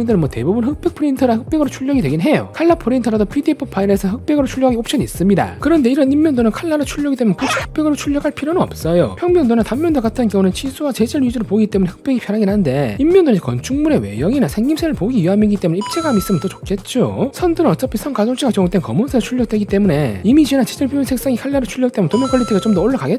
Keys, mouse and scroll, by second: 0.8 click, 6.1-7.0 ctrl+scroll up 4, 6.4 ctrl+middle click, 7.5 ctrl+middle click, 7.5 ctrl+scroll up 2, 8.2 space, 8.4 click, 10.0 click, 11.1 click, 13.0 click, 14.2 click, 15.0 click, 16.3 space, 16.4 click, 17.5 click, 19.0 click, 20.5 click, 21.8 click, 22.3 click, 22.9 click.